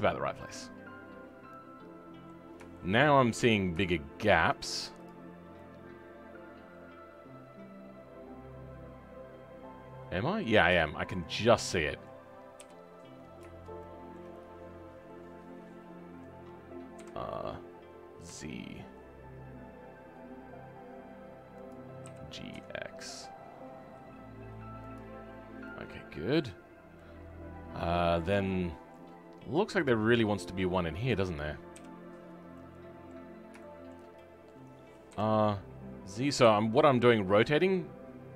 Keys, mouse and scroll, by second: 0.4-3.1 middle drag, 3.1-3.5 scroll up 7, 3.8-5.0 shift+middle drag, 5.0 click, 5.2 scroll up 2, 5.5-11.4 middle drag, 11.4-11.7 scroll up 2, 11.7 middle click, 12.6 KP_7, 13.8-17.0 shift+middle drag, 17.0 r, 25.2-25.6 scroll down 2, 25.6 middle click, 26.6-26.9 scroll down 3, 26.9-29.8 middle drag, 29.8 click, 30.0-30.7 scroll down 3, 30.7-31.7 middle drag, 31.7 KP_7, 32.5 middle click, 33.3-33.6 scroll up 3, 33.6-35.0 shift+middle drag, 35.0 r.